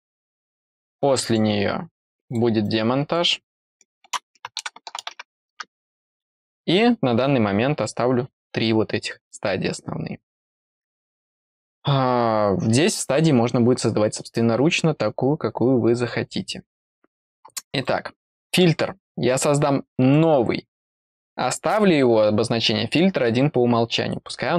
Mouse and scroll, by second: 1.2 click, 2.2 click, 2.6 click, 17.7 click, 20.1 click.